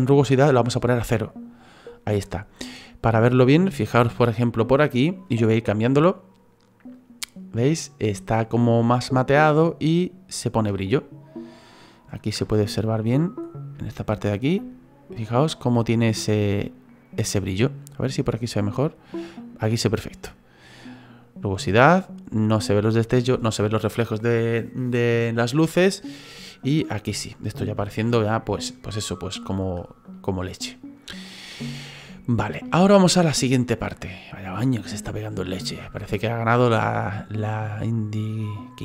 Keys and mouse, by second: 0.8 click, 6.9 click, 11.0 middle click, 12.4 shift+middle click, 13.0 middle click, 15.4 middle click, 18.8 click, 30.1 middle click, 31.7 shift+middle click, 32.1 middle click, 32.8 shift+middle click, 36.2 middle click.